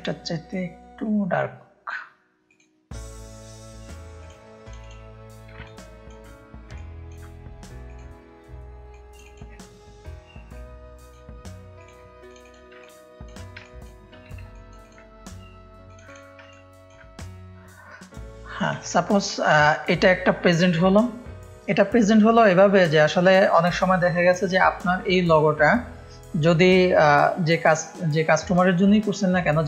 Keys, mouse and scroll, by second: 1.0 click, 2.4 click, 4.1-5.5 drag, 5.6 ctrl+space, 5.6 ctrl+click, 6.7 ctrl+click, 8.9 click, 10.5 click, 11.7 click, 12.8 ctrl+space, 12.8 ctrl+click, 13.6 click, 13.6 space, 14.5 click, 14.5 space, 15.8 click, 16.4 ctrl+space, 16.5 ctrl+click, 18.8 click, 18.8 space.